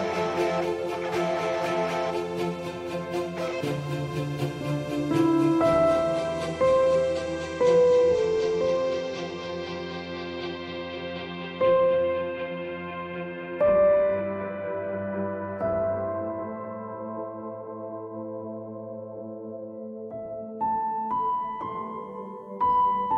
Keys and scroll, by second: 19.6 0, 20.0 1.